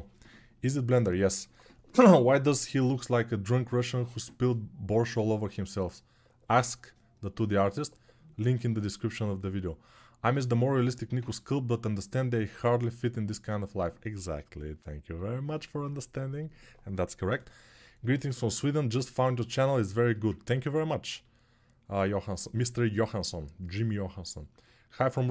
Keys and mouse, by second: 24.4-25.3 alt+shift+middle drag.